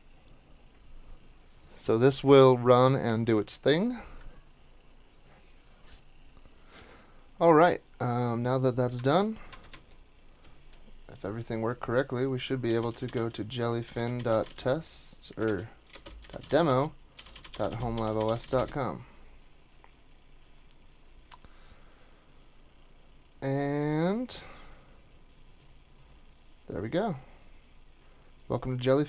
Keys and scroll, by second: 8.9 super+Tab, 9.5 super+Tab, 9.7 super+Tab, 12.4-19.1 typing, 15.5 alt+BackSpace, 15.9 alt+BackSpace.